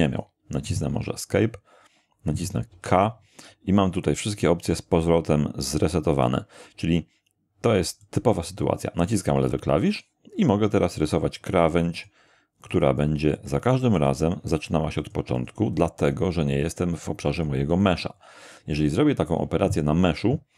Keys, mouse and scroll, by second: 0.2 click, 0.9 Escape, 2.7 k, 8.0-11.6 drag, 11.9 click, 12.7 click, 13.3 click, 13.9 click, 14.5 click, 15.0 click, 16.1 click, 16.5 click, 16.9 click, 17.3 click, 17.7 click.